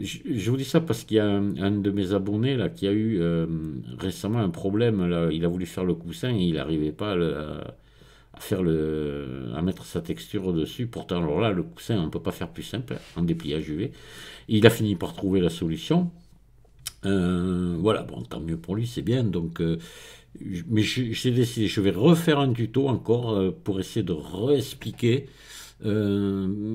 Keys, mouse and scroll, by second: 1.1-2.1 scroll down 2.